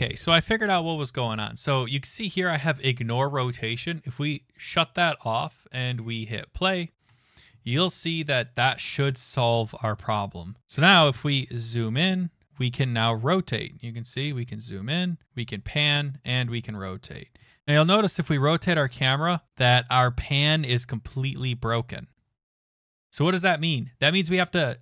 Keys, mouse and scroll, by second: 6.3 click, 6.8 click.